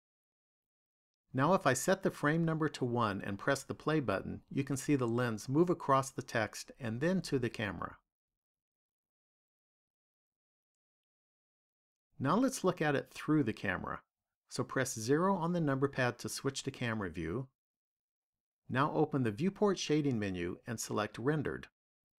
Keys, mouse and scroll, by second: 3.3 click, 5.3 click, 11.2 click, 15.9 KP_0, 19.0 click, 21.7 click.